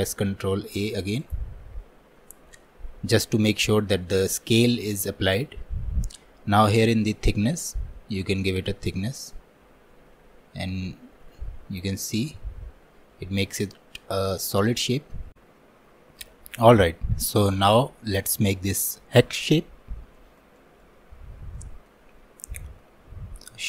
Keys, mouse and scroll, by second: 0.4 ctrl+a, 8.5-12.1 drag, 12.1-14.9 middle drag, 14.9-15.2 scroll down 1, 15.2 middle click, 20.2 alt+middle click, 21.2 scroll up 1, 21.6 shift+middle click, 22.1 scroll down 2.